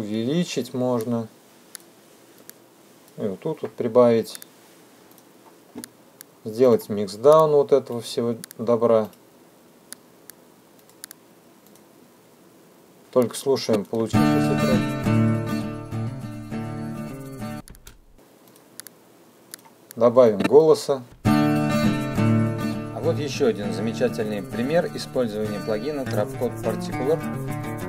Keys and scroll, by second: 12.9 space.